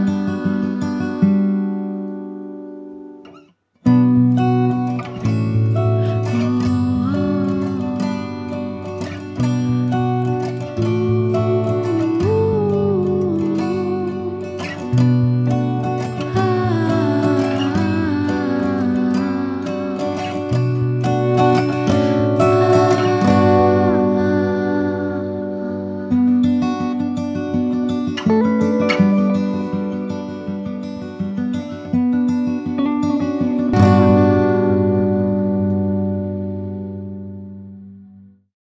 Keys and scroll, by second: 21.7 KP_9, 21.9 KP_0, 22.8 KP_9, 22.9 KP_0, 26.2 KP_2, 26.2 KP_5, 29.6 KP_1, 29.8 KP_8.